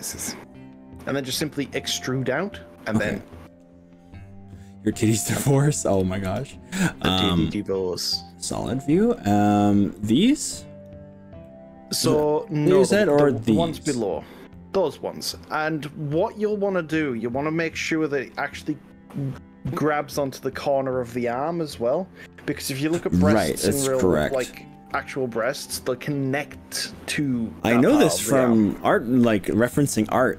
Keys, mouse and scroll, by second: 1.1 click, 1.5-2.1 scroll up 3, 2.5-3.7 middle drag, 5.3-6.1 drag, 6.3 click, 7.3 z, 9.3 z, 10.0-10.9 drag, 11.4-12.6 middle drag, 12.7 click, 13.2 click, 14.5-21.9 middle drag, 21.9-22.7 drag, 23.7 shift+click, 24.3 shift+click, 25.1 shift+click.